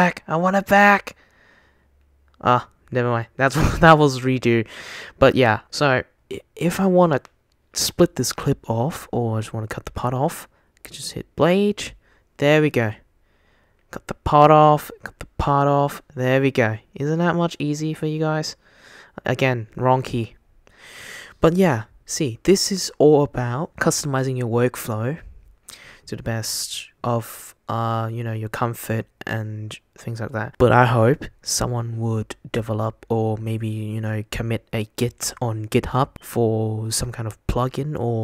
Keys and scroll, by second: 0.0 shift+super+z, 0.1 shift+super+z, 1.9 super+z, 5.7 shift+super+z, 11.1 super+b, 13.9 super+b, 15.1 super+b, 16.5 shift+super+z, 16.9 shift+super+z, 17.1 shift+super+z, 17.4 shift+super+z, 17.9 shift+super+z, 18.9 super+z, 19.3 super+z, 19.7 super+z.